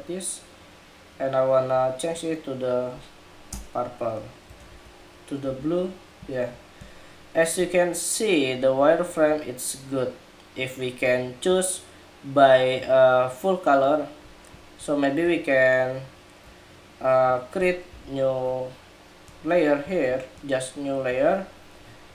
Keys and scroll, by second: 4.5 super+-, 17.6 super+=.